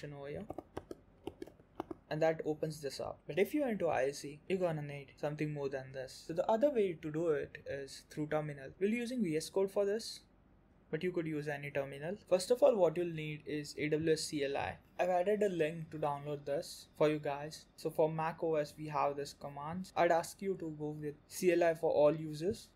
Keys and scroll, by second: 14.8 alt+q.